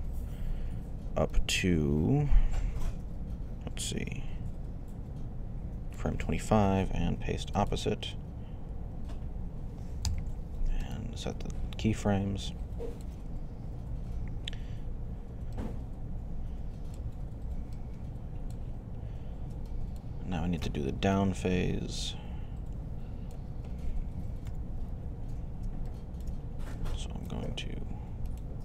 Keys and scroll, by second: 9.9 i, 24.3 3.